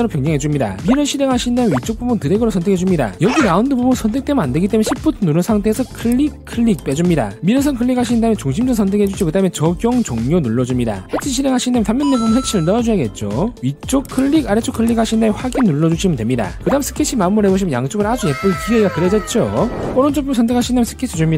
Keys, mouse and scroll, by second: 0.7 click, 1.6 click, 2.4 shift+click, 6.3 shift+click, 7.0 shift+click, 9.5 click, 10.0 click, 10.4 click, 12.1 click, 14.2 click, 15.3 click, 16.1 click, 18.0 click, 20.0 click, 21.1 click.